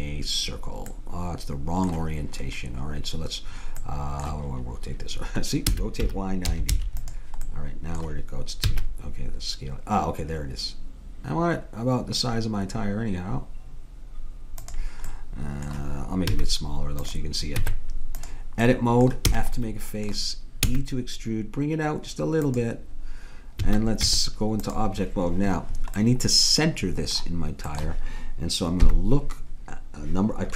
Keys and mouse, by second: 1.0-5.7 middle drag, 5.7 r, 7.5-9.5 drag, 8.7 s, 16.3 s, 17.6 Tab, 19.4 f, 20.7 e, 23.7 a, 24.1 Tab, 26.0 middle click, 28.8 KP_1.